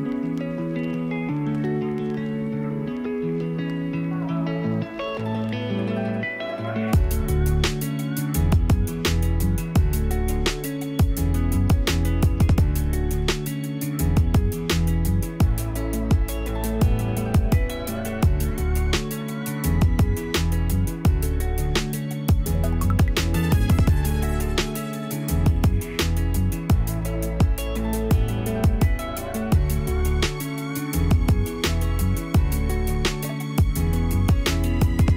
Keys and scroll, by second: 20.0 p, 30.4 e.